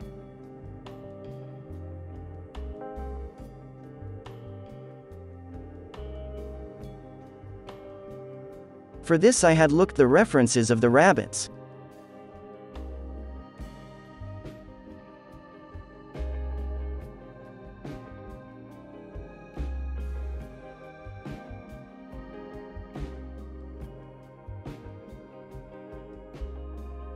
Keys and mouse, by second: 4.8 f, 7.3 middle click, 7.6 f, 7.7-11.1 drag, 7.7-9.0 right drag, 11.1 middle click, 11.2-19.3 drag, 19.5 middle click, 19.9-27.1 drag, 22.0 f, 26.0 f.